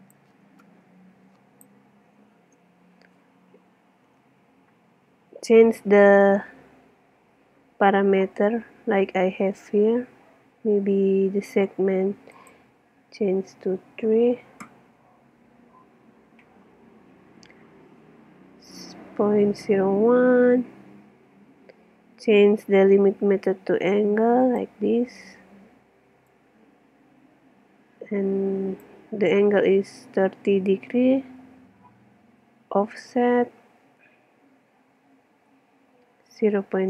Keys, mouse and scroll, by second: 0.1-1.9 drag, 12.4-14.2 drag, 24.4-28.2 drag.